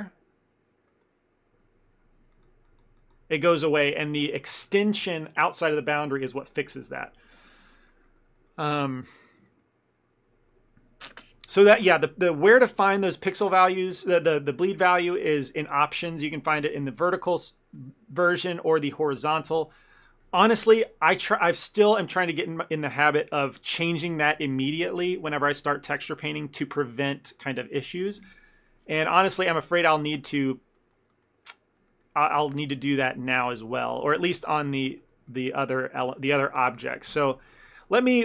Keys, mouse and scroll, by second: 1.0 middle click, 2.4 click, 7.8 ctrl+middle click, 8.4 middle click, 8.9 ctrl+middle click, 9.3 middle click, 9.5 ctrl+middle click, 12.6 scroll down 1, 16.7 middle click, 23.9 click, 28.5 scroll down 1, 29.7 shift+middle click.